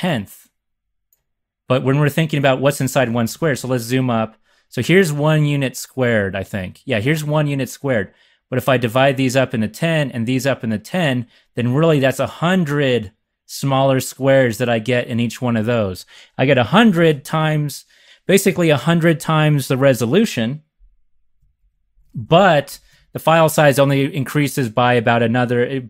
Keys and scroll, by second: 2.9-3.9 typing, 21.5 super+-, 21.9 super+-, 22.1 super+-.